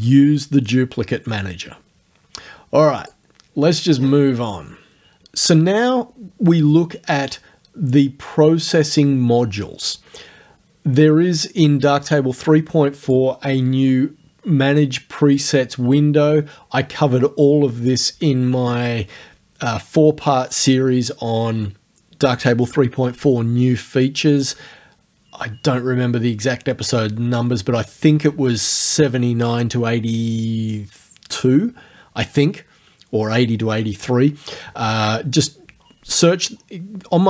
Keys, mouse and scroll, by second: 3.0 click, 4.0-4.3 scroll down 2, 13.1 click, 15.4 click.